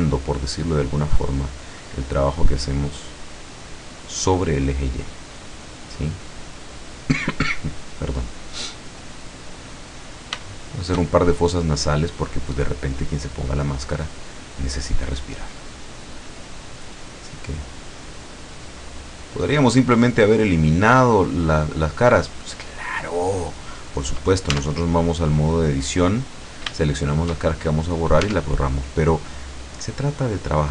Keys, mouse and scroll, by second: 0.0 click, 0.8 scroll down 1, 1.3-2.4 middle drag, 2.6-3.1 scroll up 1, 3.8-6.0 drag, 6.1 click, 7.1-8.1 scroll down 2, 8.3-8.6 scroll up 2, 9.6-11.9 middle drag, 12.1 scroll up 1, 12.9 click, 16.1 click, 17.2 click, 18.1 click, 19.1 click, 20.0 click, 20.8 click, 21.7 click, 22.6 click, 24.6 Tab, 26.8 shift+middle click, 28.3 Tab, 29.5-30.7 drag.